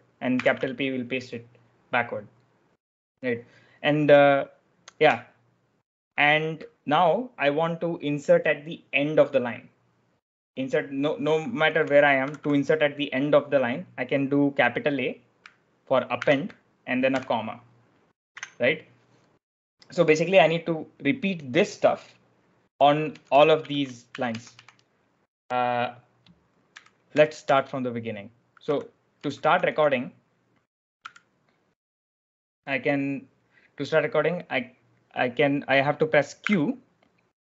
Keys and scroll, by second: 0.0-0.3 typing, 11.3-12.8 typing, 16.1 shift+a, 17.0 ,, 18.3 Escape, 22.8-24.2 typing, 26.6-29.8 typing, 30.9 b, 32.5 typing, 36.3 q.